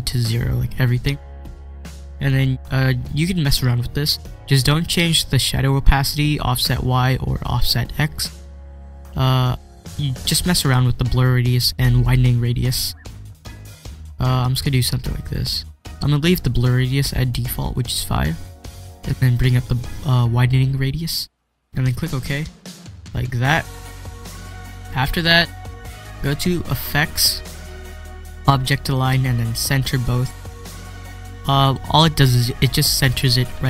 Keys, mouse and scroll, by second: 1.9 click, 9.4-12.4 drag, 13.3-22.1 drag, 26.9 click, 29.8 click, 29.8 click.